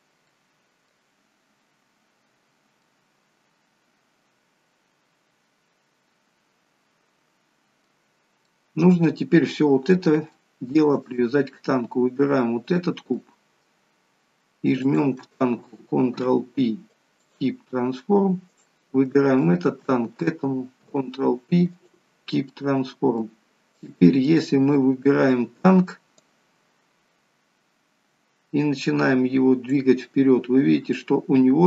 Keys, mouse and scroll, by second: 8.5 middle click, 10.4 shift+middle click, 11.0 middle click, 12.6 click, 13.2 middle click, 14.8 shift+click, 16.2 ctrl+p, 18.5 click, 19.5 shift+click, 20.8 ctrl+p, 23.8 click, 24.3 middle click, 26.5 click, 30.2 middle click.